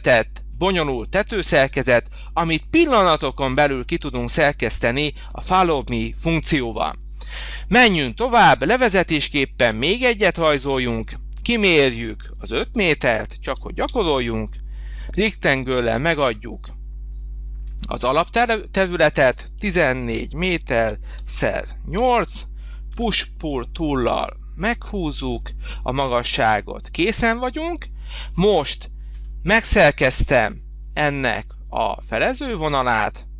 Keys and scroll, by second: 6.6 h, 13.3 5, 13.8 Return, 19.4 1, 19.9 4, 20.9 8, 21.8 Return, 22.8 p.